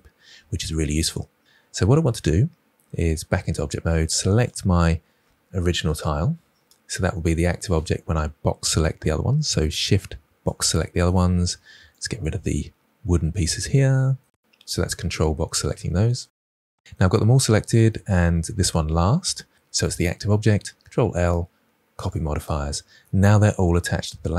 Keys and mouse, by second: 3.2 Tab, 4.3 click, 8.6 shift+drag, 12.8 ctrl+drag, 19.5 ctrl+l.